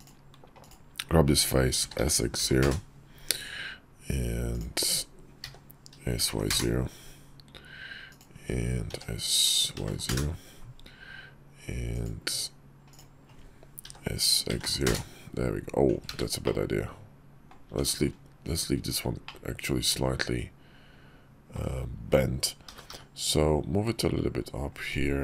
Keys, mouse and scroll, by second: 0.3 click, 1.5 s, 4.2 click, 5.1 s, 7.8 click, 8.6 s, 11.6 click, 12.6 click, 13.6 s, 15.8 ctrl+z, 16.2-17.2 middle drag, 17.4 Tab, 19.0-21.3 middle drag, 22.4 g, 25.1 Tab.